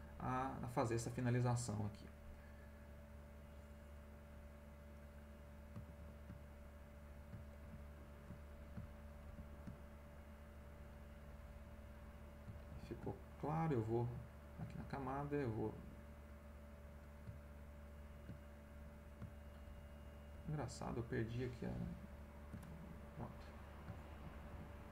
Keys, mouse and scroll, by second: 1.8 middle click, 3.1 click, 4.9 click, 5.8 ctrl+x, 7.6 ctrl+z, 9.2 ctrl+z, 10.9 right click, 11.5 middle click, 12.4 ctrl+middle click, 12.7 ctrl+z, 14.3 click, 19.6 ctrl+z, 20.3 ctrl+z, 21.3 ctrl+z, 22.9 ctrl+middle click, 23.5 middle click, 24.1 ctrl+z.